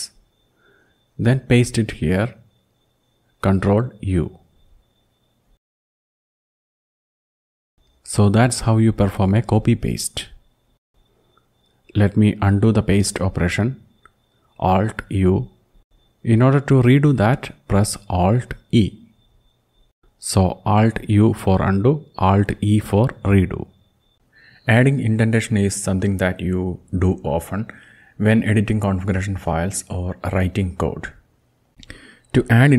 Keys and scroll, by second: 2.0 Return, 6.0 ctrl+u, 13.7 alt+u, 18.0 alt+e, 20.5 alt+u, 24.2 Up, 24.2 Down.